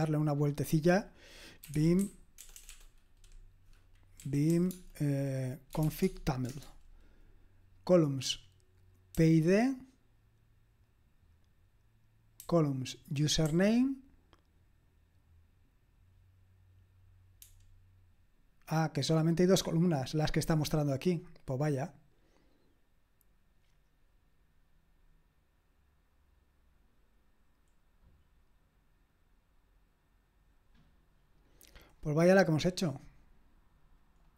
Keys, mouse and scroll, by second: 1.5-2.7 typing, 4.3-6.2 typing, 6.5 Return, 9.1 j, 12.4-13.5 typing.